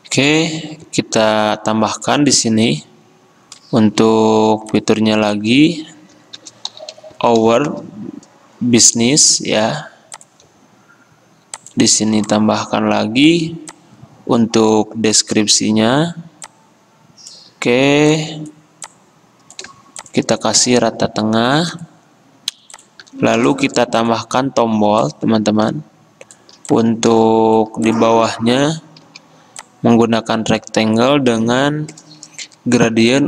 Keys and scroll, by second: 3.8 F10, 4.5 t, 6.5-7.3 typing, 23.5 space, 29.2 typing, 31.2-31.9 typing, 33.0 v.